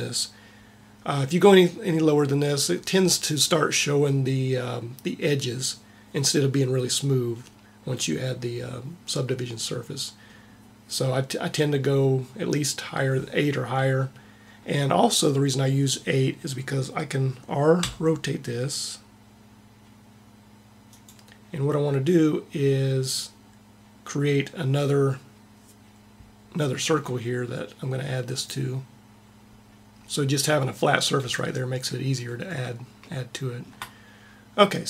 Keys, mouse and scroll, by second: 17.6 r, 17.7 r, 26.7 r, 33.0-34.5 middle drag.